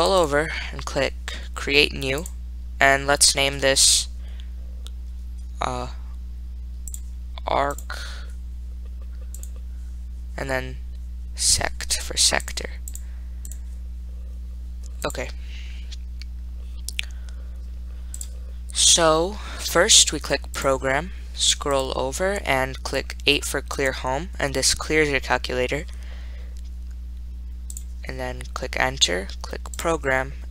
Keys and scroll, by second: 0.2 Right, 0.4 Right, 2.5 1, 15.3 4, 18.5 Return, 22.0 Right, 24.1 8, 28.1 Return.